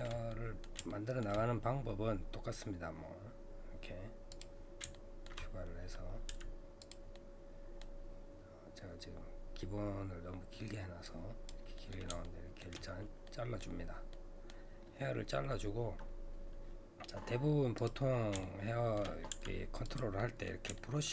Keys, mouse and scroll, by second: 2.3-4.3 scroll down 2, 4.3 click, 5.0 shift+middle click, 5.6-6.3 scroll down 1, 6.3 f, 7.1-10.2 middle drag, 11.1 click, 11.8 middle click, 11.9-12.2 scroll up 1, 12.2 shift+middle click, 12.8-13.2 scroll up 3, 13.2 middle click, 13.8 scroll down 1, 14.1-17.5 middle drag, 17.8 click, 18.4 shift+middle click, 19.3 f, 20.2-21.1 middle drag.